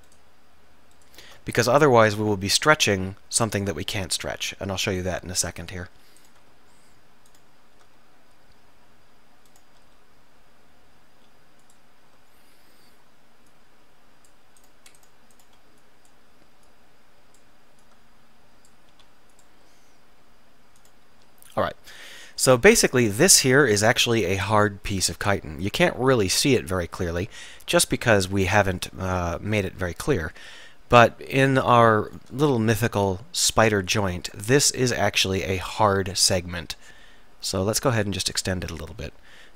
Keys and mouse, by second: 1.9-4.0 middle drag, 4.9 s, 5.7-8.4 drag, 8.4-9.6 middle drag, 9.6-10.7 drag, 10.9 click, 11.2 s, 17.5-19.0 drag, 19.0 s, 21.4 middle click, 22.0 click, 29.3-31.4 drag, 32.6 click, 32.7-34.3 middle drag, 35.0 middle click, 37.6 e, 38.6 click, 39.4-39.5 middle drag.